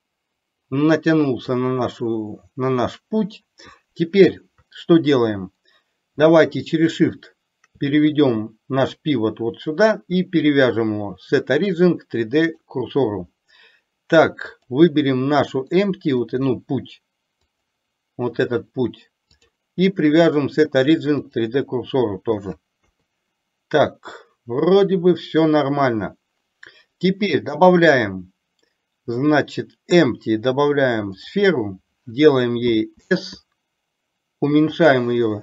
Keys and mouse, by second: 10.8-12.7 drag, 14.7 click, 15.8-16.2 middle drag, 17.7 click, 19.4-21.6 drag, 22.9 KP_3, 27.9-31.4 drag.